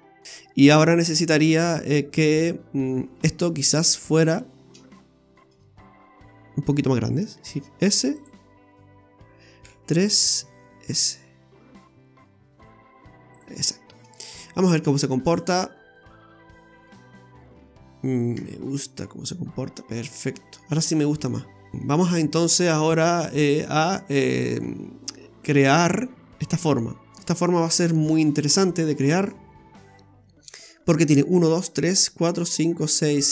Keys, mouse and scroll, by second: 0.2 middle click, 0.2 scroll down 2, 2.6-3.0 scroll down 1, 3.0 middle click, 3.8 right click, 4.2 alt+shift+right click, 4.4 right click, 5.4 middle click, 7.4 shift+s, 9.6 KP_1, 10.4 s, 13.6-14.1 scroll down 2, 13.9 middle click, 15.3 click, 15.7 scroll down 1, 15.9 middle click, 18.3 Tab, 18.9 middle click, 24.6-25.2 scroll up 5, 25.2 shift+middle click.